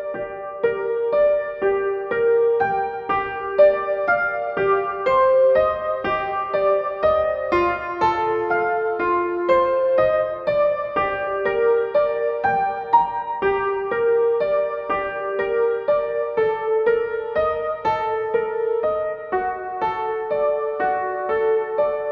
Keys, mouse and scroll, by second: 20.1 click.